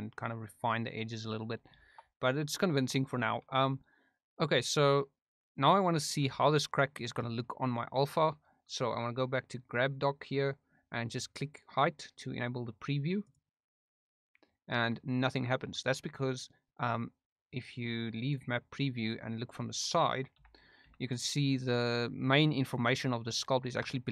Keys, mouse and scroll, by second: 0.1 click, 0.3 click, 0.7 click, 0.9 click, 1.7 shift+middle click, 3.2 shift+middle click, 6.2 Tab, 9.9 click, 13.9 click, 18.2 click, 18.9-19.9 middle drag, 20.3 KP_5, 20.8 KP_1, 23.8-24.1 shift+middle drag.